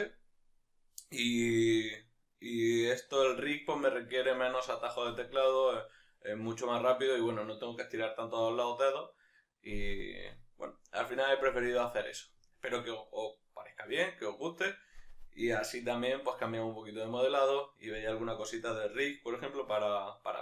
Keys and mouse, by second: 2.7 right click.